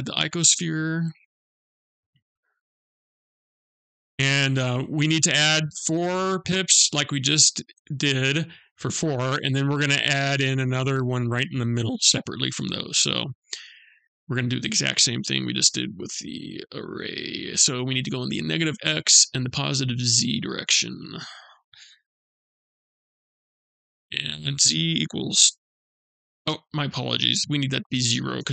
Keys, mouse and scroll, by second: 2.2 click, 13.0 click, 15.1 click, 20.6 click.